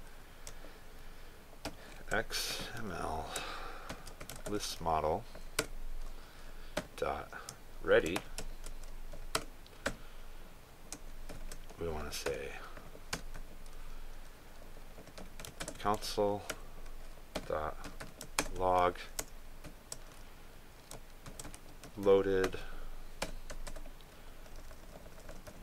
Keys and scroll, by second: 5.4 ctrl+space, 16.6 ctrl+space, 19.4 ctrl+space.